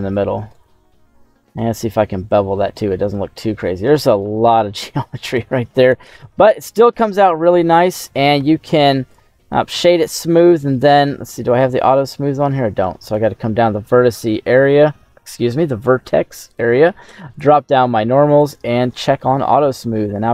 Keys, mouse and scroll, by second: 0.0 alt+shift+right click, 1.5 ctrl+b, 3.0-3.7 scroll down 5, 3.7-4.3 scroll up 3, 4.3-5.2 scroll down 4, 5.2 click, 5.9 Tab, 6.0-8.1 middle drag, 8.3 q, 11.1 q, 13.0 click, 17.2 click, 18.3 click, 19.1 middle click, 19.4 scroll down 1, 19.9 middle click.